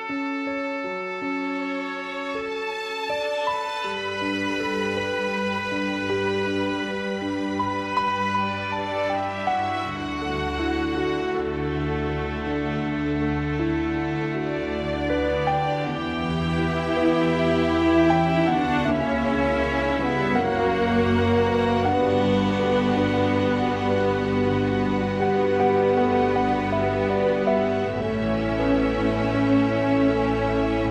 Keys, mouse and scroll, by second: 0.4 g, 1.2 r, 2.3-2.8 drag, 3.5 r, 4.5 r, 5.1-5.9 drag, 6.4 x, 6.9-8.2 drag, 9.2 click, 10.3 s, 10.9 click, 11.6 s, 15.0 click, 15.7 g, 17.0 click, 17.7 g, 18.8 click, 19.4 click, 19.7 s, 21.5 r, 22.4 click, 22.8 shift+click, 23.4-24.5 drag, 25.7 click, 26.1 g, 27.1 shift+click, 27.9 s, 29.3 click, 30.3 s.